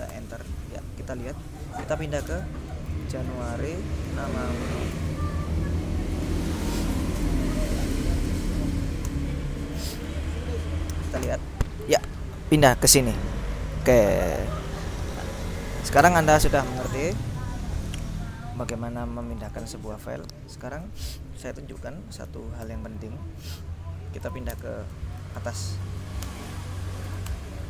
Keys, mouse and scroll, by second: 0.2 Return, 1.9-5.0 typing, 6.2-10.1 typing, 11.3 Return, 13.8-16.7 drag, 19.3 click, 20.6 click, 22.7 ctrl+l, 24.0-25.8 typing, 26.4 Return, 27.2 s, 27.4 Return.